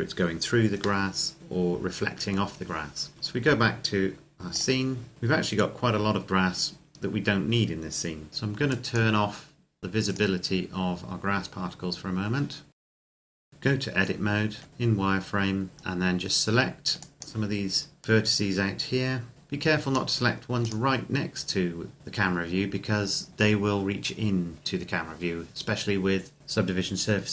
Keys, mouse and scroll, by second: 0.9 middle click, 3.1 click, 5.3-8.3 scroll down 1, 8.3 click, 9.8 right click, 12.7 click, 12.8 shift+middle click, 12.8 scroll down 1, 13.2 click, 14.3 Tab, 14.7 a, 14.8-15.8 scroll down 1, 15.8 scroll up 1, 15.9-16.8 scroll down 1, 16.8 click, 20.4 right click.